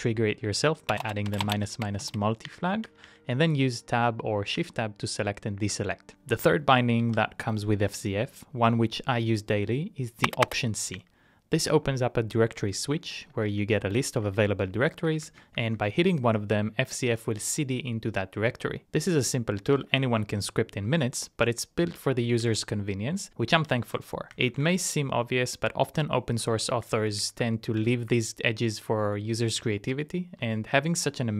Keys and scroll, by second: 0.4 Page_Down, 2.5 Tab, 2.8 Tab, 3.0 Tab, 4.6 Tab, 5.8 Return, 5.9-6.6 typing, 7.2 alt+c, 10.9 Tab, 11.8 Down, 11.9 Down, 12.3 Down, 12.5 Down, 12.7 Down, 13.0 Down, 13.5 Tab, 14.0 shift+Tab, 14.2 shift+Tab, 14.8 Down, 15.0 Up, 15.2 Up, 15.4 Up, 15.6 Up, 15.8 Up, 16.7 Down, 16.9 Return, 19.5-20.3 typing, 23.8 ctrl+c, 24.3 typing, 24.7 Return, 26.3-28.4 typing, 27.5 Return, 28.4 Up, 30.1 alt+c, 31.0 Down, 31.3 Down.